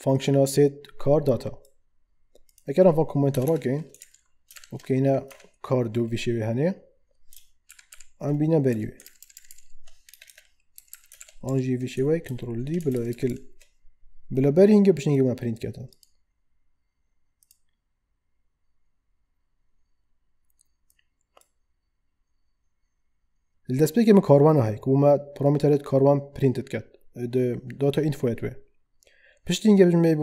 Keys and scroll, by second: 3.3 BackSpace, 4.0 ctrl+Right, 4.5 shift+Left, 5.3 2, 7.7 alt+shift+Up, 8.7 Up, 9.0 ctrl+Right, 10.1 Return, 10.7 Down, 11.2 alt+shift+Up, 12.2 ctrl+d, 12.9 alt+shift+Down.